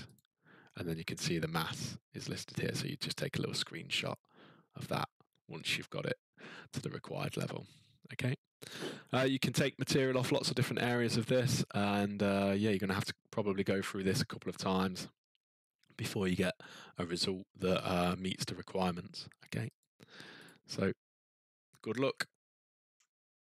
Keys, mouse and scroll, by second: 0.1 click, 7.6-11.4 scroll, 11.4-12.8 scroll, 13.0 scroll, 14.0-14.3 ctrl+scroll, 15.3-17.6 scroll, 19.8 click, 20.4 click, 22.9-23.5 ctrl+scroll.